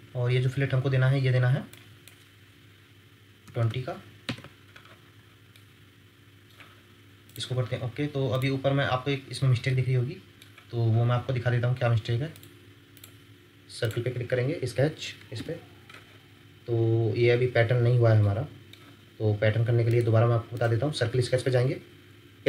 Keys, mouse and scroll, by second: 3.4 typing, 4.2 Return, 5.0 scroll up 1, 5.5 middle click, 8.9 scroll up 1, 9.7 middle click, 15.3 ctrl+8, 16.6 scroll up 1, 17.1 scroll down 1, 18.2 ctrl+middle click, 18.8-19.4 ctrl+scroll down 1.